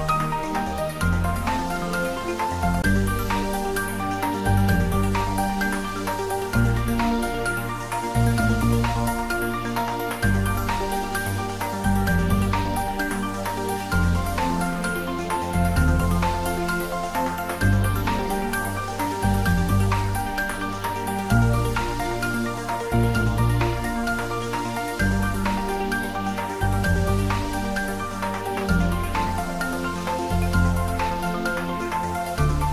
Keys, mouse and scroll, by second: 0.8 click, 1.9 click, 4.7-5.2 scroll up 1, 5.2-8.5 middle drag, 8.5 click, 11.1 click, 14.9-19.1 drag, 24.8 click, 27.1-27.6 scroll down 1, 27.6 middle click, 28.8 Tab, 29.7-30.7 scroll up 1, 30.7-32.7 middle drag.